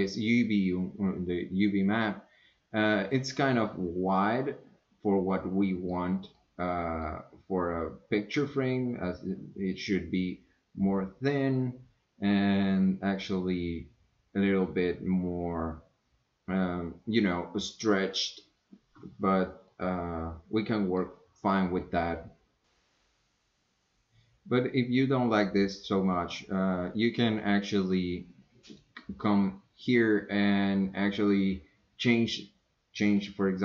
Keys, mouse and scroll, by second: 4.3-6.0 middle drag, 6.3-6.6 scroll down 2, 6.6 middle click, 19.7 scroll down 2, 19.9-21.1 middle drag.